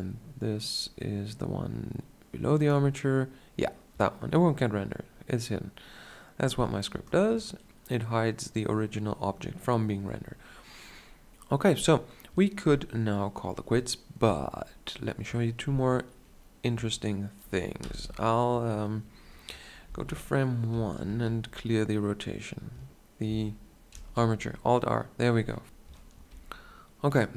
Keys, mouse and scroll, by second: 17.7 alt+r, 19.8 shift+Left, 20.9 alt+r, 22.9 ctrl+z, 23.8 alt+r, 25.6 KP_7, 26.2 g.